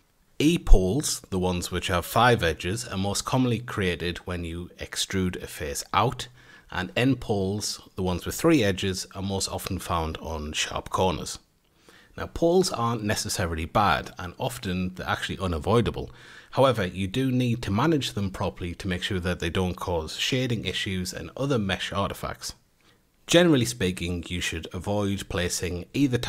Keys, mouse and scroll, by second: 0.0 F8, 1.1 Tab, 2.3 3, 3.9-4.4 middle drag, 4.4 click, 5.9 e, 7.9 1, 8.6 2, 9.3 click, 9.9 shift+click, 10.2 shift+click, 10.7 shift+click, 11.1 shift+click, 12.1 a, 12.7 click, 13.1 shift+drag, 13.5 shift+click, 13.8-14.4 scroll up 2, 14.4-15.0 middle drag, 15.0 a, 17.9 Tab, 18.7 F8, 20.0-20.9 shift+middle drag, 20.9 Tab, 22.1-25.6 middle drag, 25.6 Tab.